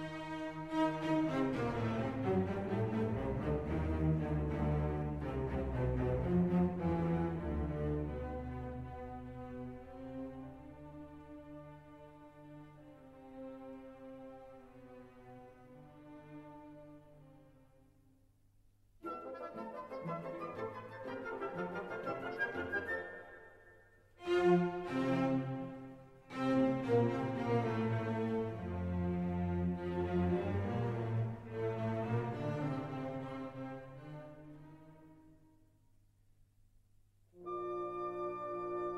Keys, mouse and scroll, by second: 1.1 3, 1.5 5, 2.4 click, 3.3 3, 3.8 0, 5.9 click, 7.6 5, 8.1 0, 8.8 click, 9.2-9.6 scroll down 2, 9.8 scroll up 2, 11.3 click, 12.5 click, 14.1 2, 14.7 0, 15.4 click, 16.4-17.3 typing, 18.8-20.1 drag, 20.6 click, 21.3 click, 21.7 click, 22.8-24.0 drag, 24.4 click, 24.9 click, 26.0 ctrl+click, 26.5 ctrl+click, 27.8 click, 28.4 click, 29.2 click, 30.3 click, 31.5 ctrl+click, 32.1 ctrl+click, 33.3 ctrl+click, 36.4 scroll down 2, 36.9 scroll up 2, 37.7 scroll down 2, 38.2-38.7 scroll up 2, 38.7-38.9 scroll down 2.